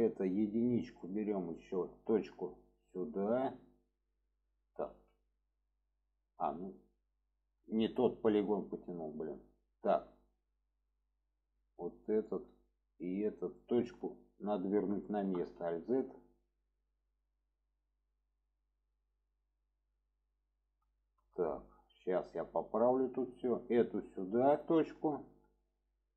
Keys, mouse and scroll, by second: 1.0 click, 1.5-2.2 alt+middle drag, 2.8-4.1 drag, 5.3-7.6 middle drag, 7.8 middle click, 8.6-10.1 middle drag, 11.5 click, 11.8 middle click, 12.9 shift+click, 13.5-14.6 alt+middle drag, 15.0-15.4 shift+middle drag, 15.5 alt+z, 16.3-19.9 drag, 21.0 shift+middle click, 22.5 click, 23.7-24.6 drag.